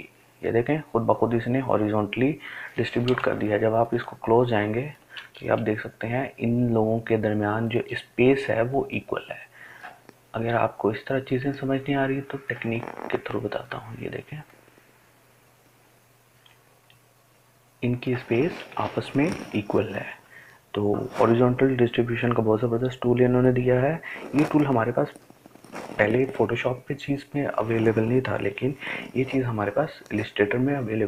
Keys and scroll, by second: 29.0 Delete.